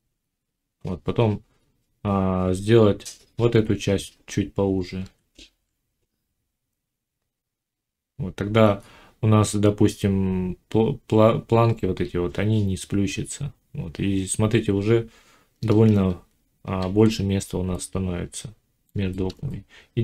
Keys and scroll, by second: 4.9 g.